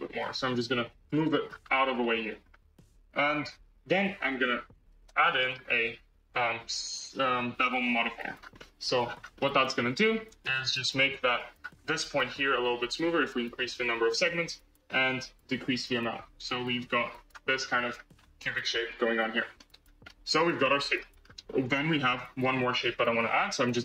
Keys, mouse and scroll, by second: 1.2 scroll, 1.9-2.7 shift+middle drag, 2.7 scroll, 3.8 alt+z, 4.8 alt+z, 5.0 Tab, 5.2 middle click, 6.1-8.1 drag, 8.1-8.5 scroll up 1, 8.5 shift+middle click, 8.9-9.3 scroll up 7, 9.3 shift+middle click, 10.2-11.5 drag, 11.5-12.2 scroll up 11, 13.8-17.1 drag, 17.5-18.7 scroll down 16, 18.7-19.7 middle drag, 19.7 scroll up 4, 20.0-21.1 middle drag, 21.1-22.2 scroll down 1, 22.2 click.